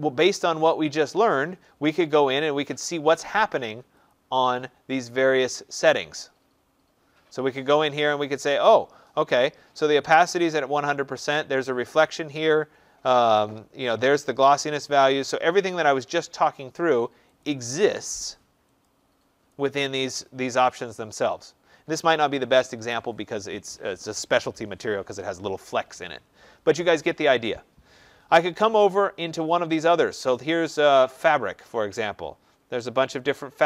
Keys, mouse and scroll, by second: 3.9 click, 17.3 click, 18.7 click, 19.5 click, 29.4 click, 32.2 middle click, 32.2 middle click, 32.4 middle click.